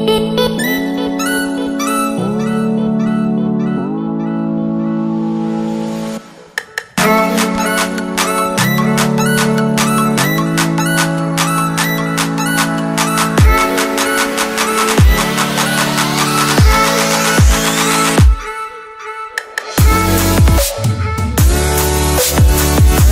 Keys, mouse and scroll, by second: 2.4 click, 4.8-6.4 scroll up 1, 6.4 click, 17.1 Tab, 20.9 click.